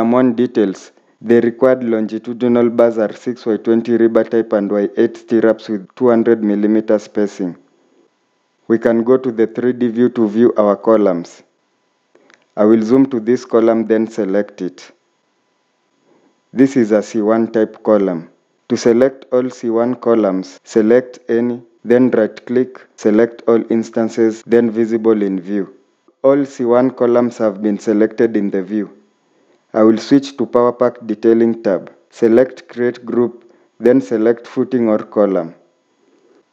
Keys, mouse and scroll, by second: 8.1 scroll down 1, 8.5 scroll up 1, 8.7 scroll down 1, 9.1 scroll up 1, 9.3 scroll down 1, 12.6 scroll up 1, 22.0 right click, 24.3 right click, 25.6 scroll down 1.